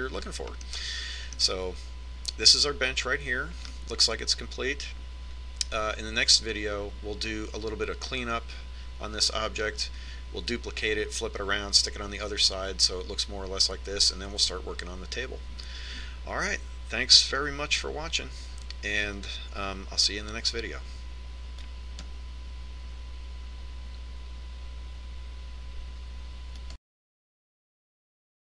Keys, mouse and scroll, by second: 0.7-4.1 middle drag, 5.3-7.3 middle drag.